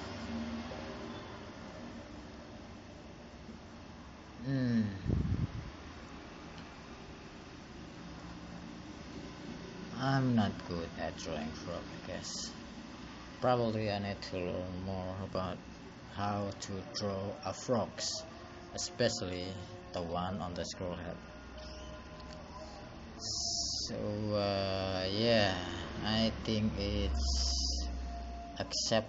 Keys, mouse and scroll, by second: 21.1 click, 26.1 click, 26.4 click.